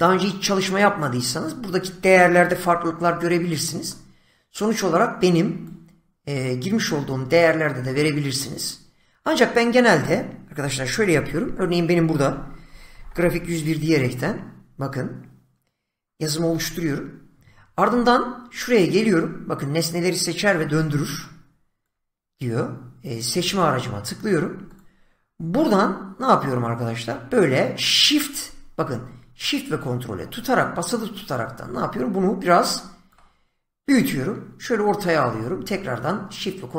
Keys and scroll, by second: 2.5 <, 11.2-13.7 typing, 12.1 Caps_Lock, 16.5 Tab, 20.5 <.